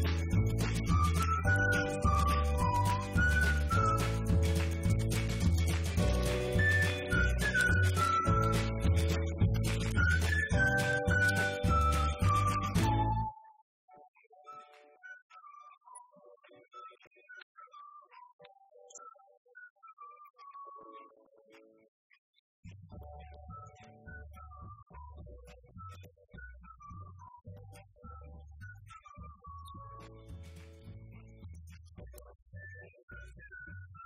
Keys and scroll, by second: 1.2 Right, 1.8 Up, 2.0 Right, 2.7 Left, 5.2 Down, 5.4 Left, 6.3 Right, 7.4 =, 8.0 Left, 9.7 Escape, 9.9 Right, 10.3 Left, 10.9 =, 11.3 Left, 13.7 *, 16.8 Left, 17.9 Return, 18.9 Up, 19.3 shift+Down, 22.2 ctrl+d, 23.2 Down, 23.8 Right, 24.4 Left, 25.3 5, 25.5 Return, 25.8 Up, 26.5 Delete, 26.7 Right, 28.4 =, 30.0 Escape, 30.4 Left.